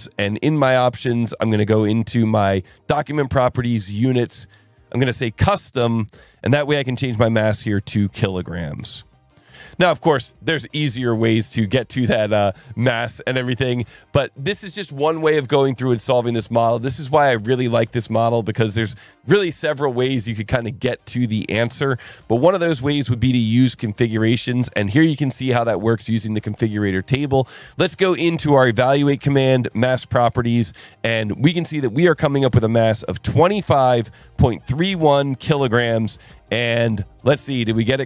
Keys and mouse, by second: 0.6 click, 1.3 click, 2.8 click, 3.8 click, 5.4 click, 7.0 click, 7.6 click, 8.9 click, 9.9 click, 10.8 click, 12.7 click, 25.0 click, 31.2 click, 35.4 click, 36.2 click, 36.8 click, 37.6 click.